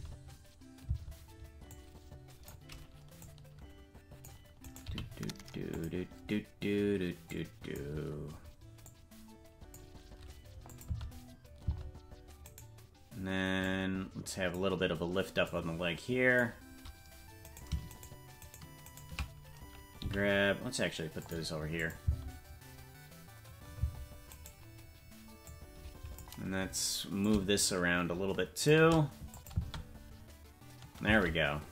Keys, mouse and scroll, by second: 1.0 space, 1.6 click, 3.2-4.3 drag, 4.6 right click, 4.8 g, 7.2 click, 8.8-9.8 drag, 10.6-11.7 drag, 10.8 space, 11.7 space, 12.6 right click, 13.6 click, 15.4-16.4 drag, 17.4 right click, 17.9-19.3 shift+right drag, 20.0 g, 21.7 click, 22.0 space, 24.4 right click, 24.4 space, 25.4 click, 27.2-28.7 drag, 29.3 click, 29.5 space, 31.4 space.